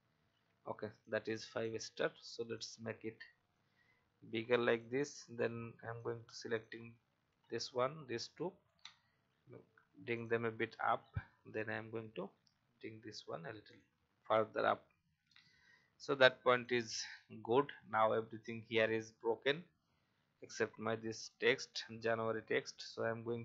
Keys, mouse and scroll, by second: 1.0 click, 2.5 shift+click, 4.6 click, 6.5 shift+click, 7.7 shift+click, 8.8 shift+click, 10.1 click, 11.5 click, 13.6 click, 14.1-14.6 alt+scroll down 1, 15.2 alt+scroll down 1, 16.5 click, 17.1-17.6 alt+scroll down 1, 18.4-21.5 drag, 21.7 alt+scroll up 1, 22.8 alt+scroll down 1.